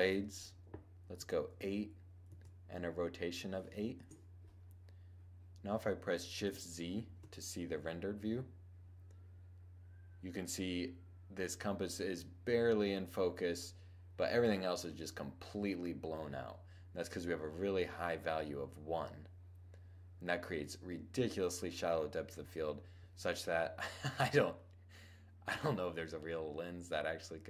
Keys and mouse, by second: 6.8 shift+z.